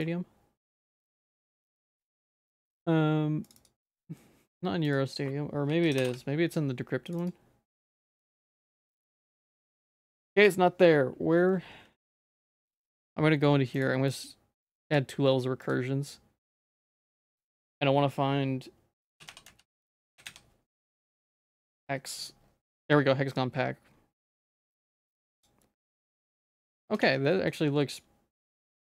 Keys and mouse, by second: 25.9 middle click, 26.5 Tab, 26.9 Tab, 27.3 middle click, 27.7 ctrl+s.